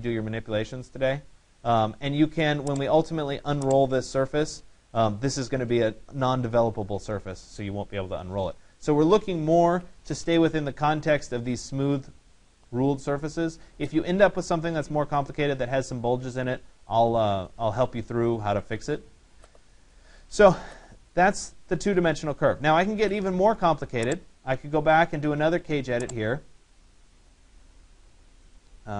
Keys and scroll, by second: 9.2 ctrl+z.